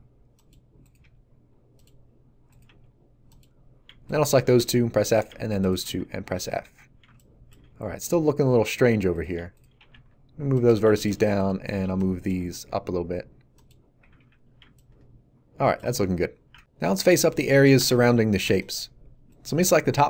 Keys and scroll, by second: 4.5 f, 6.2 a, 9.8 g, 9.9 z, 11.8 b, 12.3 g, 12.5 z, 14.0 a.